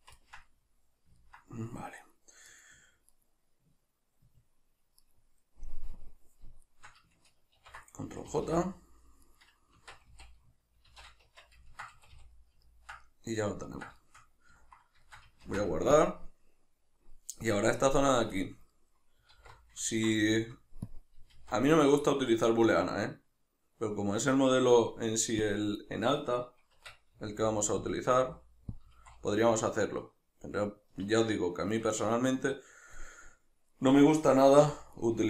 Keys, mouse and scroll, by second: 2.0 right click, 2.5 right click, 3.2 right click, 5.0 right click, 6.0-6.7 drag, 6.7 shift+right click, 7.6 ctrl+j, 8.3 a, 8.7-9.3 middle drag, 9.3 right click, 9.8 Tab, 10.9 shift+n, 11.3 Tab, 11.7-18.0 ctrl+middle drag, 12.0 a, 15.5 ctrl+s, 18.0 right click, 18.4-20.9 shift+middle drag, 19.3 alt+q, 20.9 click, 21.3 shift+a, 27.2 s, 28.0 click, 28.2 s, 28.8 click, 28.9 s, 31.0 click, 33.0-35.0 middle drag, 34.6 2, 35.0 right click.